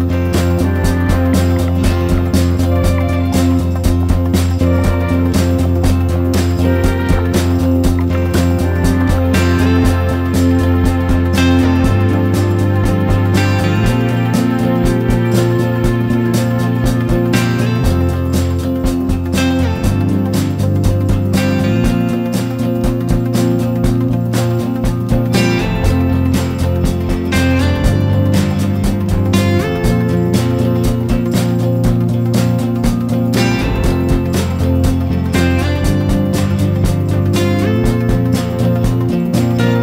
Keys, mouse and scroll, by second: 4.6-8.2 drag, 8.6 ctrl+g, 10.6 click, 13.3 Down, 13.5 Down, 13.7 Down, 13.9 Down, 19.4 click.